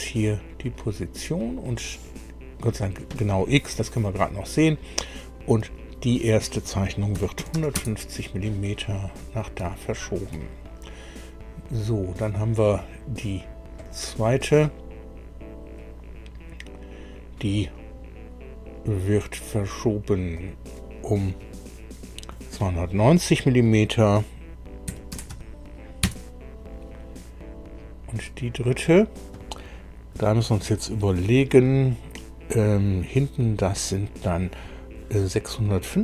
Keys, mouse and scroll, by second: 0.6 click, 1.9 click, 7.1 KP_1, 7.4 KP_5, 7.6 KP_0, 7.8 KP_Enter, 9.1 scroll down 2, 9.6 shift+middle click, 13.8 click, 20.4 click, 24.8 KP_2, 25.1 KP_9, 25.3 KP_0, 26.0 KP_Enter, 28.1 click.